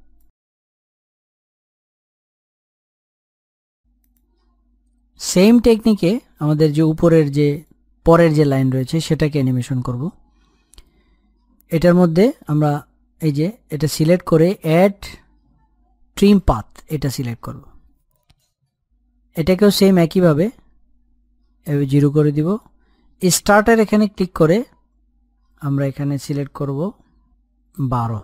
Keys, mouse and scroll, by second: 2.5 scroll up 1, 9.0 click, 16.0 click, 21.8-24.8 drag.